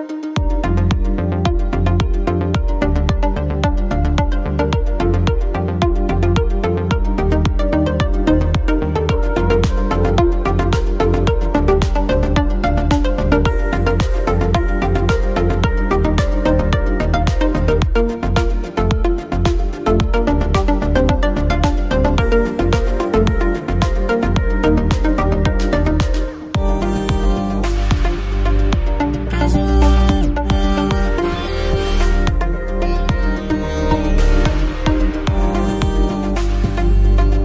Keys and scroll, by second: 21.8 ctrl+t.